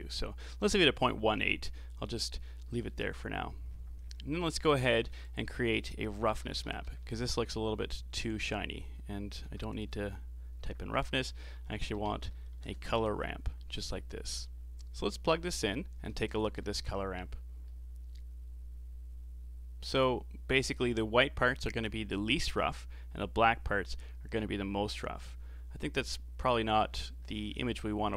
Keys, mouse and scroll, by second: 1.1-3.7 middle drag, 3.7-4.2 scroll down 6, 4.3 middle click, 5.1 shift+a, 7.3 s, 9.4 shift+a, 12.5 r, 14.8 click, 16.3 ctrl+shift+click, 17.6-20.6 middle drag, 25.9 click.